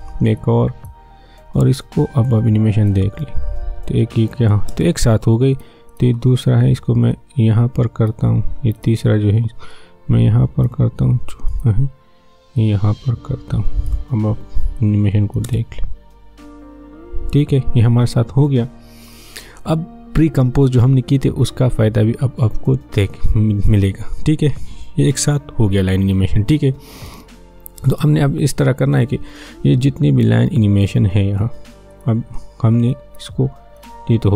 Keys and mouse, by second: 0.0 ctrl+d, 0.4-2.9 drag, 2.9 space, 5.5-15.4 drag, 15.4 space, 29.9-34.3 drag.